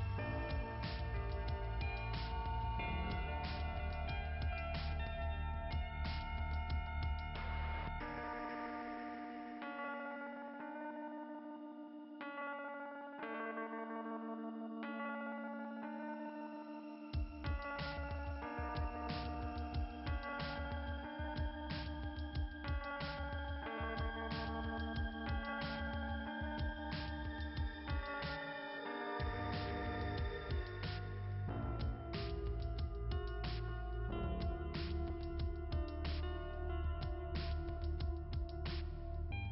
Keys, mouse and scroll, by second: 2.3 click, 2.4 click, 2.7 click, 3.1 click, 8.7 click, 9.1 click, 9.6 click, 9.7 click, 14.2 click, 14.6 click, 14.7 click, 22.0 click, 22.4 click, 33.3 click, 33.4 click, 34.2 click, 35.0 click.